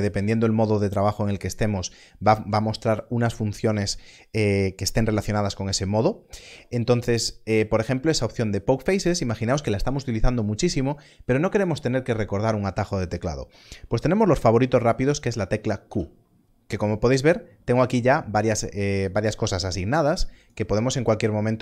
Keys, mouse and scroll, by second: 15.8 q, 20.3 q, 20.8 right click.